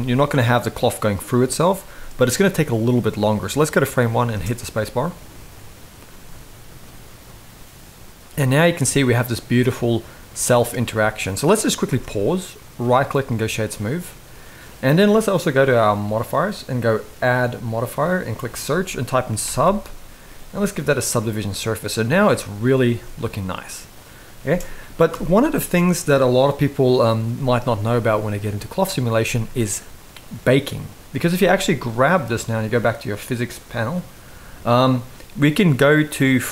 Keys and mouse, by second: 2.1 middle click, 4.0 space, 11.6 space, 11.8 middle click, 12.6-13.1 right drag, 13.8-14.5 middle drag, 15.7 click, 17.1-20.8 drag, 21.4-22.0 middle drag, 22.6 space, 24.2 space, 24.8 shift+Left, 27.5-28.1 middle drag, 31.6 click, 33.0 click, 35.9 click.